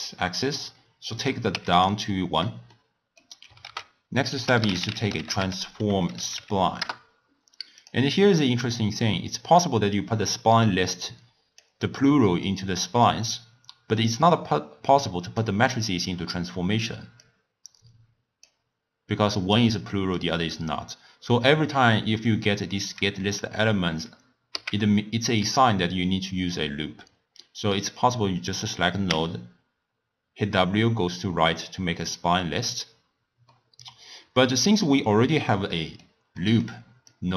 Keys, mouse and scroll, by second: 1.2 click, 2.7 middle click, 3.6 ctrl+a, 8.4 click, 9.3-12.4 drag, 14.1 drag, 17.2-19.7 drag, 20.1-23.1 drag, 24.8 x, 25.4 click, 29.1 w, 33.5-37.1 middle drag, 37.1 click.